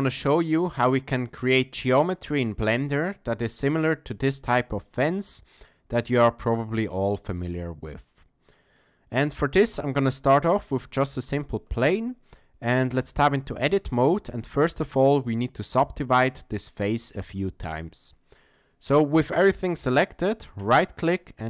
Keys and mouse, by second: 5.4-7.4 ctrl+middle drag, 8.7 click, 11.0-11.6 shift+middle drag, 12.9 Tab, 14.1 middle click, 14.6 shift+middle click, 16.7 shift+middle click, 20.6-21.4 drag.